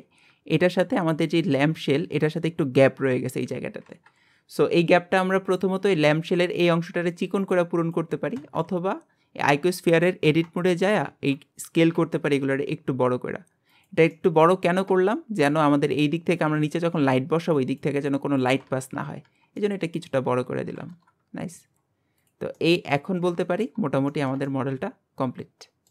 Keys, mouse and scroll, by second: 2.8-3.8 scroll up 1, 4.5-8.1 scroll down 1, 8.1 scroll down 1, 10.5-11.0 scroll down 2, 11.0 a, 14.1 middle click, 14.8 scroll down 2, 15.1-18.6 shift+middle drag, 18.8-19.2 scroll down 2, 19.2 Tab, 19.5 middle click, 20.3-20.8 scroll down 1, 20.8 KP_1, 21.7-22.2 scroll down 5, 22.2 click, 22.5 middle click, 23.1 scroll down 4, 23.4 shift+middle click, 23.8 scroll up 1, 24.1-25.9 shift+middle drag.